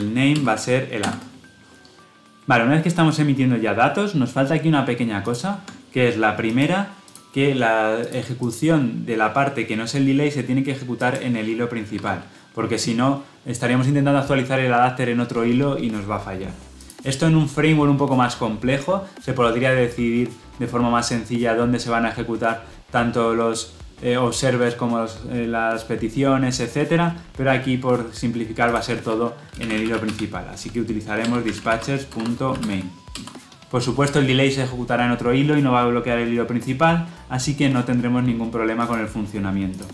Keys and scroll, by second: 0.2 Return, 5.2 ctrl+b, 31.2 Return.